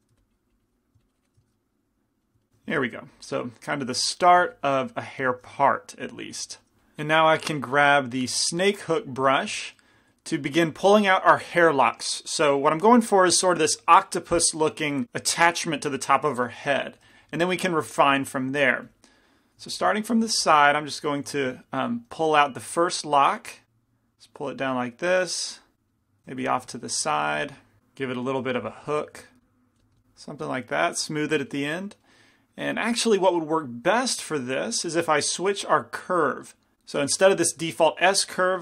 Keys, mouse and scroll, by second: 0.2 f, 0.2 i, 0.3-1.8 drag, 1.6 right click, 1.7 middle click, 2.9 f, 3.3-6.7 drag, 4.1 f, 8.1-9.8 drag, 17.3-19.8 drag, 17.9-19.8 middle drag, 18.9 f, 19.8 f, 20.4 f, 21.4 f, 22.3 f, 23.4-24.4 drag, 26.4 f, 26.8 f, 28.6 f, 29.5-32.3 drag, 29.5-31.7 right drag, 29.8 f, 33.9-36.7 drag, 33.9 middle click.